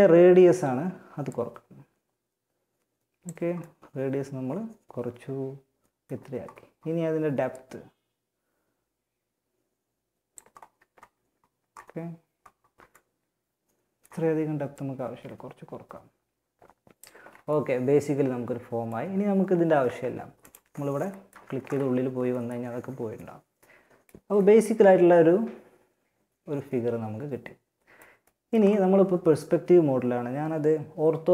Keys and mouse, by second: 2.3 middle click, 6.7-8.5 drag, 9.5-12.1 middle drag, 13.9-15.8 drag, 15.8 middle click, 19.6 middle click, 20.5 Tab, 20.9 Tab, 25.4-26.5 middle drag, 27.5-30.5 middle drag.